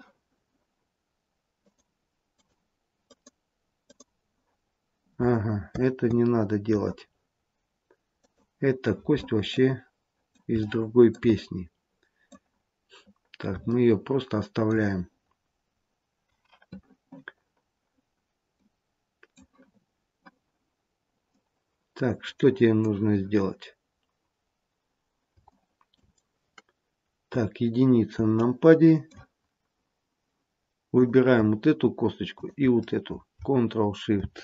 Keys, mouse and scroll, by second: 1.6 click, 2.2 click, 3.7 click, 8.1 click, 9.5 middle click, 10.5 shift+middle click, 11.3 middle click, 12.5-13.4 scroll down 2, 13.5 middle click, 15.0-16.0 scroll up 1, 16.0-16.6 scroll up 1, 17.3-18.0 scroll down 1, 18.5 middle click, 21.2 middle click, 25.5 shift+middle click, 27.2 KP_1, 28.3 shift+middle click, 29.4-30.2 scroll up 1, 30.9 click, 32.2 shift+click, 34.0 ctrl+shift+c.